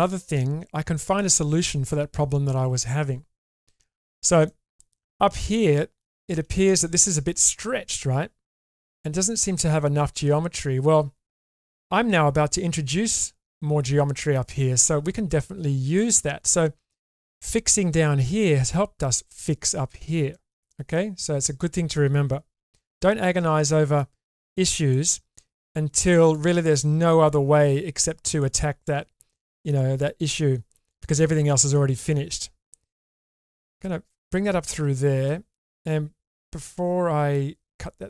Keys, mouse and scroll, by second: 4.5 middle click, 5.6 middle click, 6.1 shift+middle click, 20.3 shift+middle click, 20.7-21.7 middle drag, 22.5 k, 23.5-33.8 middle drag, 34.1-35.3 middle drag, 35.9-37.3 middle drag, 37.7 middle click.